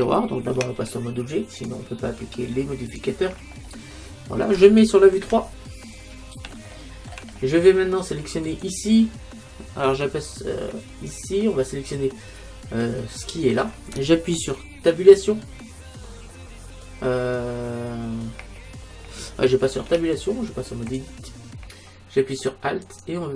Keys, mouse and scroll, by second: 0.6 Tab, 2.9-4.9 drag, 4.9-5.9 middle drag, 5.3 KP_3, 6.6-8.5 middle drag, 8.7-10.5 right drag, 11.1-13.0 right drag, 17.7-19.9 middle drag, 19.9 Tab, 22.8-23.3 right drag.